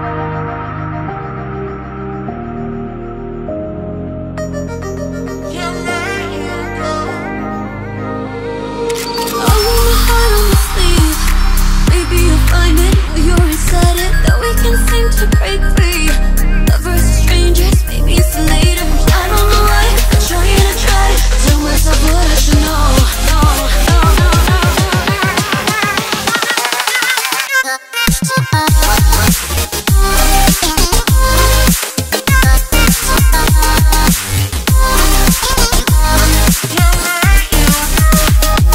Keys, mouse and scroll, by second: 1.6 2, 3.0 click, 5.7 click, 6.9 Tab, 7.8 Tab, 8.6 r, 12.0 2, 12.8 click, 14.1-14.9 scroll up 1, 14.9-16.0 scroll up 1, 16.0 r, 19.8-22.9 drag, 23.3 Tab, 25.1 shift+click, 27.0 ctrl+j, 27.9 Tab, 30.5 click, 30.8-31.9 scroll up 1, 31.9 click, 32.8 shift+click, 33.5-36.2 right drag, 36.2 click, 37.1 shift+click, 37.6-38.7 right drag.